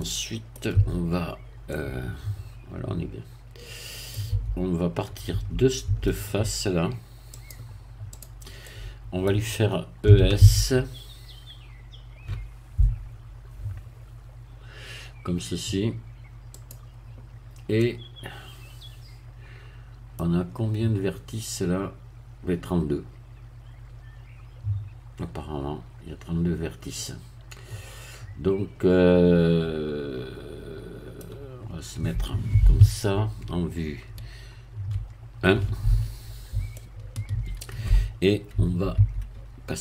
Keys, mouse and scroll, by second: 0.0 middle click, 0.7 Tab, 1.7-4.3 middle drag, 4.3 Tab, 5.3 Tab, 7.4-8.6 drag, 8.6 middle click, 10.1 e, 10.4 s, 16.5 click, 17.3-17.8 scroll up 1, 17.8-20.3 middle drag, 27.0-33.4 middle drag, 33.4-34.1 scroll up 1, 33.5 3, 34.9 1, 36.2 scroll up 2, 36.7-37.8 shift+middle drag, 38.6 Tab.